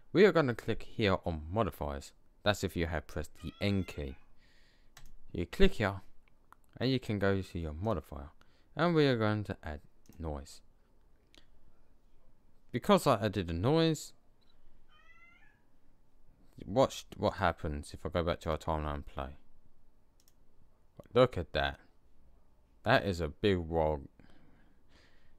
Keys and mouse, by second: 4.8-6.6 drag, 7.7-9.7 drag, 17.2-17.8 drag.